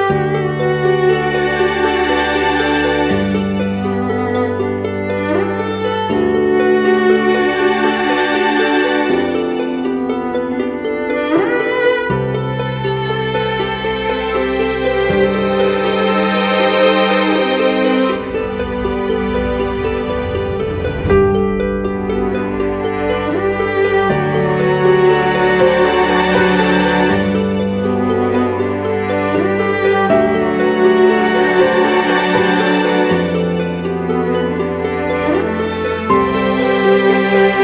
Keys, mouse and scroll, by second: 1.9 alt+shift+click, 8.1 Return, 14.4 ctrl+t, 17.2 Return, 18.5 ctrl+t, 21.5 Return, 34.7 ctrl+t, 36.3 alt+shift+click.